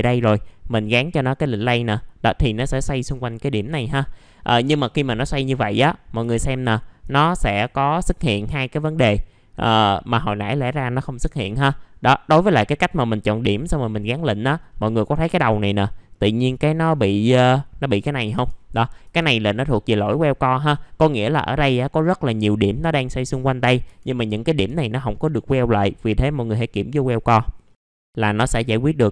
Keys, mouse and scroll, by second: 1.5 click, 4.0 middle click, 4.6 F4, 6.3 alt+middle click, 7.2 scroll up 1, 7.4 F4, 7.8-12.1 scroll up 1, 14.9 alt+middle click, 15.5-16.1 scroll down 1, 16.1 middle click, 16.4-17.4 scroll up 1, 18.3 F4, 26.9 click, 27.6 middle click, 27.7 scroll down 1, 28.0 scroll up 1.